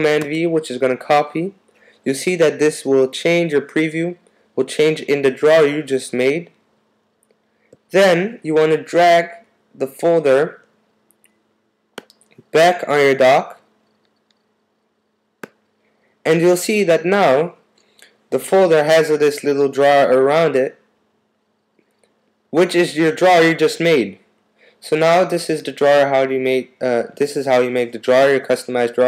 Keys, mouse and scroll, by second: 0.2 super+v.